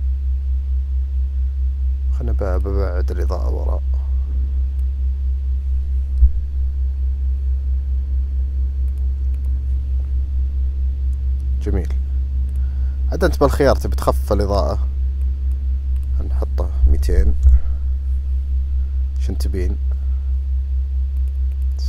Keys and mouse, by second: 2.6 click, 3.4-4.9 drag, 6.2 KP_0, 8.9-9.8 drag, 15.3 click, 16.1-18.2 drag, 17.2 KP_0, 21.3 click.